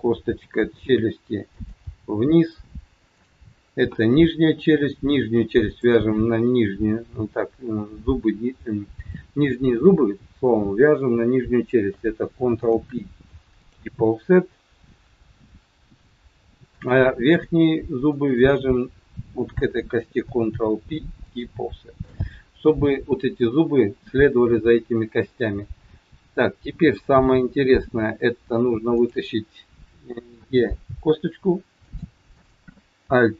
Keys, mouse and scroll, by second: 0.4 r, 1.8 g, 4.5 scroll up 3, 5.6 shift+click, 12.6 ctrl+p, 16.7 click, 18.0 shift+click, 20.2 ctrl+p, 22.3 scroll down 2, 23.3 scroll down 1, 24.6-25.1 scroll up 3, 25.1-25.5 scroll down 1, 28.1 scroll down 3, 29.0 click, 30.4 e, 32.4 click.